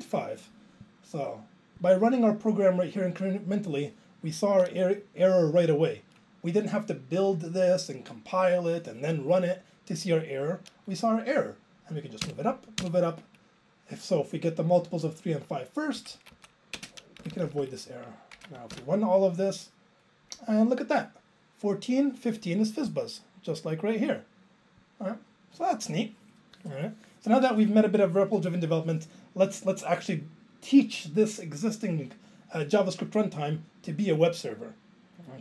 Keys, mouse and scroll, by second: 3.5 click, 12.3 alt+Up, 12.8 alt+Up, 16.0 Up, 16.1 Right, 16.3 Up, 16.7 ctrl+space, 17.2 Down, 17.3 Down, 17.5 Down, 17.6 Down, 19.0 ctrl+j.